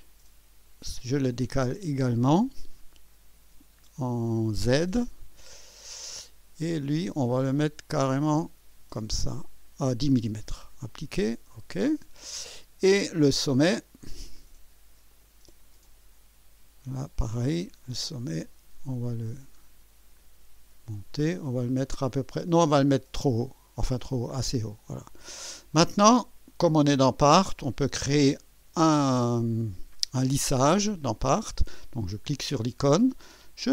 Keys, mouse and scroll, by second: 0.8 click, 1.3 click, 5.6-6.5 scroll up 4, 6.8-7.1 scroll up 2, 10.8 click, 11.9 click, 13.4 click, 15.1 click, 15.8 click, 17.8 click, 18.5-19.2 scroll up 4, 19.6 scroll up 2, 20.2 scroll up 2, 22.5 scroll up 2, 24.0 click, 24.9 click, 25.7-26.6 drag, 32.1 click.